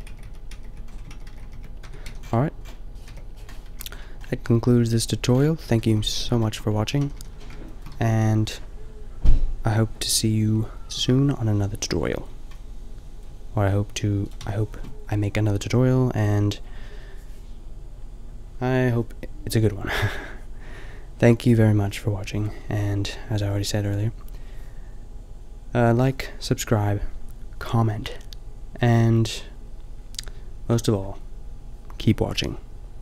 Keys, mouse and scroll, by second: 0.5 ctrl+z, 1.2 ctrl+z, 1.3 ctrl+z, 1.4 ctrl+z, 1.8 Tab, 2.0 a, 3.0 KP_5, 3.6 a, 6.9 a, 7.1 a, 7.9 a, 14.4-15.0 drag, 14.4 a, 15.0-17.8 middle drag, 24.5-33.0 middle drag.